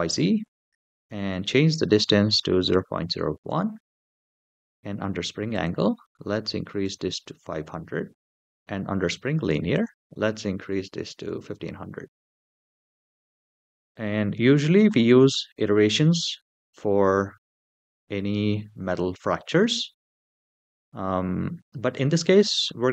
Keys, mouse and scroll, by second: 0.7-3.3 drag, 4.4-5.3 scroll down 3, 5.3-7.0 drag, 6.8 KP_0, 9.5-11.6 drag, 11.3 KP_0, 12.9-14.3 scroll down 3.